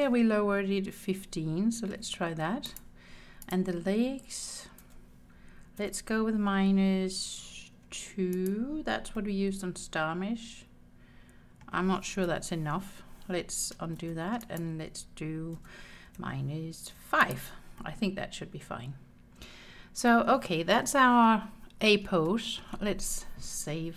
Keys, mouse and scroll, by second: 1.2 r, 1.9 1, 2.4 5, 2.7 click, 4.9 r, 5.8 -, 7.8 2, 8.4 click, 9.2-11.7 middle drag, 12.2 KP_1, 14.0 ctrl+z, 14.4 click, 15.6 r, 16.1 -, 16.9 5, 17.3 click, 17.8-20.4 middle drag, 22.3 shift+middle click.